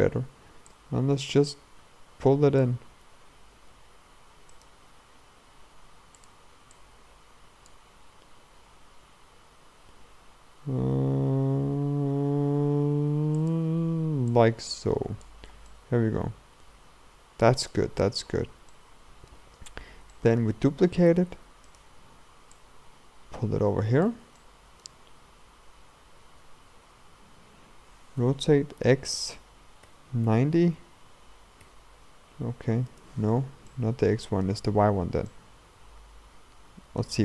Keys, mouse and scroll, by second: 0.7-3.1 drag, 3.1 r, 4.9 r, 6.8-8.0 drag, 8.0 r, 14.3-15.5 drag, 15.5 scroll down 2, 15.7-17.8 middle drag, 17.8 scroll up 1, 18.1-18.8 scroll down 2, 18.8 middle click, 19.5-20.2 scroll down 2, 20.2 shift+middle click, 21.1 shift+d, 22.6-24.4 drag, 24.4 shift+middle click, 25.4-28.0 scroll up 1, 28.0 scroll up 1, 28.2 r, 33.7-34.9 middle drag, 34.9-35.3 scroll up 1, 35.3-37.2 middle drag.